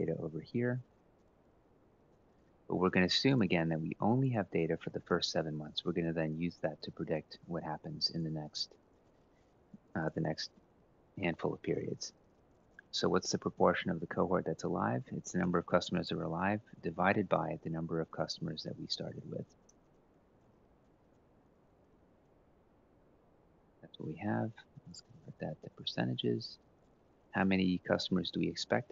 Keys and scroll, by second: 0.3 ctrl+c, 1.9 ctrl+v, 4.8 Delete, 13.1 =, 13.3 Left, 14.7 /, 15.1 Left, 16.7 F4, 19.4 Return, 20.1 Up, 20.3 ctrl+c, 22.8 ctrl+v.